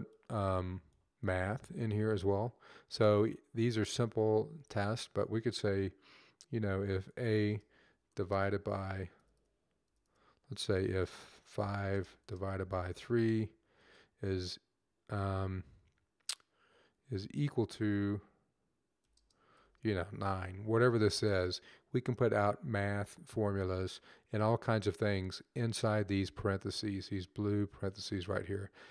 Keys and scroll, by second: 6.9 a, 8.0 /, 9.2 a, 11.4-12.9 typing, 16.5-17.0 typing, 18.8 =, 19.4 9, 22.2 typing.